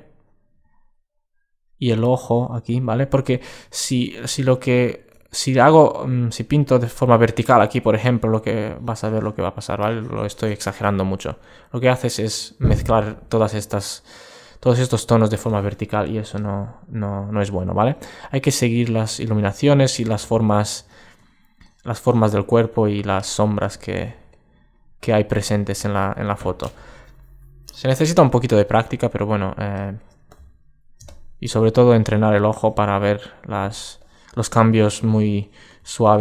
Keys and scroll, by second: 20.4 alt+space, 23.2 alt+space.